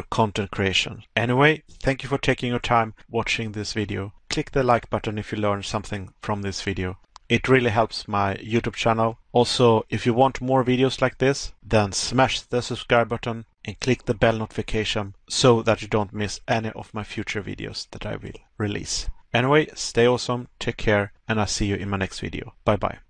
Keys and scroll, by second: 1.9 Pause, 5.2 Pause, 9.8 Pause, 12.2 Pause, 14.0 Pause, 19.1 Pause.